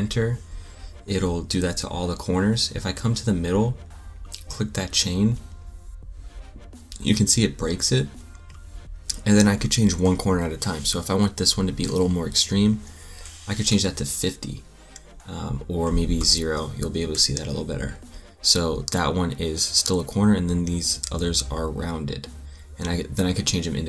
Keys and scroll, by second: 12.0-12.9 typing, 13.6 Return, 16.1 0, 16.7 Return.